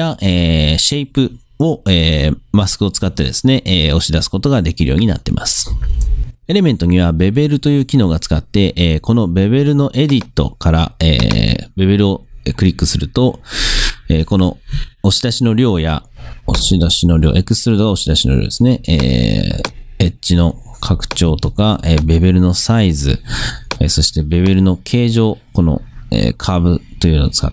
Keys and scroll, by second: 21.5 super+z.